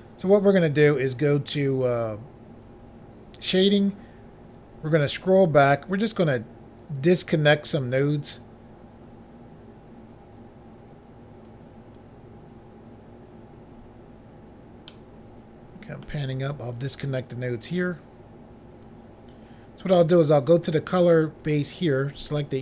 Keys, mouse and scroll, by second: 3.4 click, 3.7 click, 4.9-5.4 scroll down 3, 6.8 click, 11.4 click, 14.4 scroll down 1, 14.9 middle click, 18.8 click, 20.5 click, 20.7 click, 21.3 click, 21.4 click.